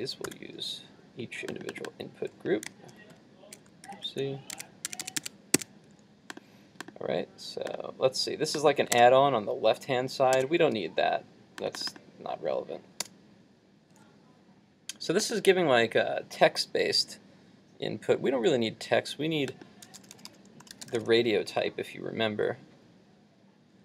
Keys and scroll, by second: 0.3 super+v, 3.9 super+z, 9.0 super+Tab.